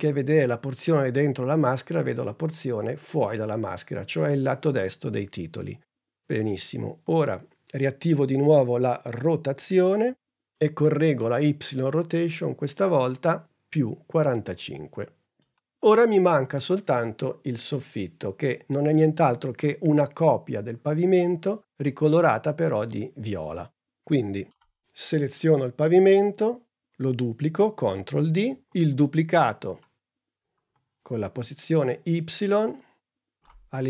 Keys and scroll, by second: 9.8 r, 27.5 super+d, 29.4 p.